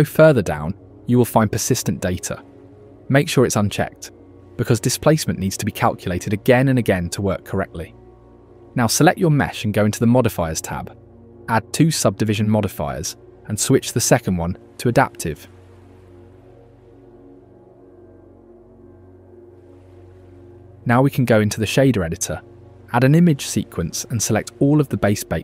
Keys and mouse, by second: 4.0 middle click, 8.5 middle click, 9.2 middle click, 11.8 click, 13.2-15.2 drag, 15.8-18.9 drag, 19.0 click, 19.8 click, 23.6 shift+a.